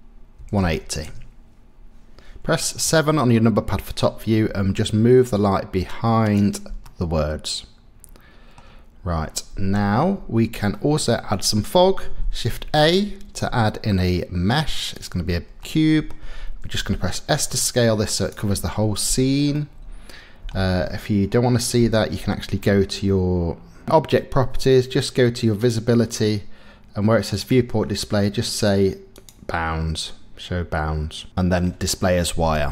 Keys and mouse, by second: 0.4 KP_1, 0.5 KP_8, 0.6 KP_0, 1.0 KP_Enter, 2.8 KP_7, 4.4 g, 6.8-7.4 drag, 7.4-8.6 middle drag, 10.7 middle click, 12.6 shift+a, 15.6-16.1 middle drag, 16.7 s, 18.1 click, 19.5 middle click, 25.6 click, 27.3 click, 31.3 middle click.